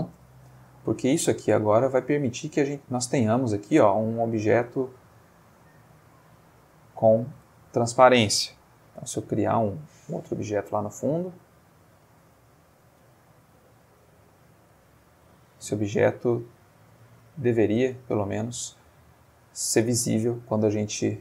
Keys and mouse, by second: 2.0-2.8 drag, 4.2-7.5 shift+drag, 8.8 shift+a, 9.9 click, 11.1 g, 11.9 click, 13.0 g, 14.0-15.1 drag, 15.1-15.8 middle drag, 16.1 click, 16.9-17.9 middle drag, 18.0 ctrl+middle click, 21.1 click.